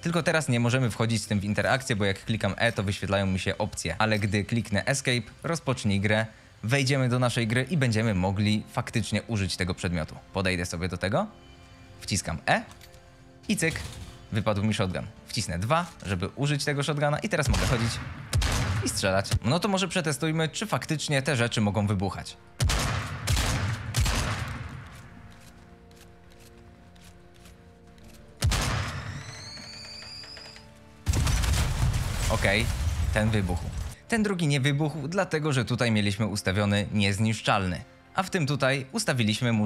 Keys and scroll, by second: 0.8 Escape, 1.6 e, 2.3 Escape, 10.0 w, 10.4 a, 11.6-15.5 typing, 21.4 a, 22.0 a, 23.9-25.6 typing, 27.4 w, 27.7 d, 28.9 a, 29.3 s, 31.7 s, 32.4 d, 32.9 w, 34.0 d, 34.7 e, 37.8 a.